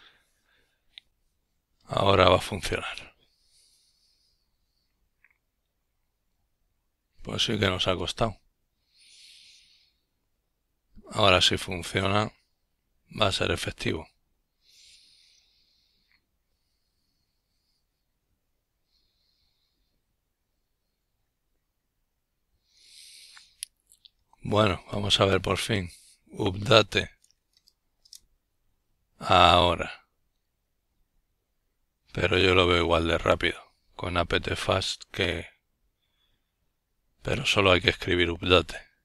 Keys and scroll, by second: 7.4 ctrl+l, 8.6-11.3 typing.